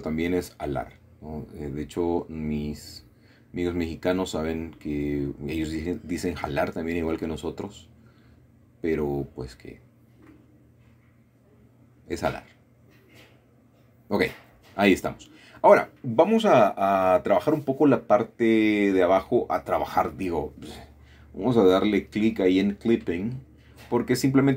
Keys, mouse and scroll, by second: 0.0 click, 0.7 click, 1.6 g, 2.3 click, 3.1 click, 3.6 typing, 4.3 click, 5.3 click, 5.6 typing, 6.6 click, 7.9 typing, 8.8 click, 9.2-10.3 scroll down 2, 9.6 typing, 10.9-12.5 shift+middle drag, 11.7 typing, 13.5 shift+middle click, 15.5 shift+middle click, 16.5 middle click, 16.9 a, 17.1 a, 19.7 click, 22.3 click, 22.9 shift+middle click, 23.6 shift+middle click.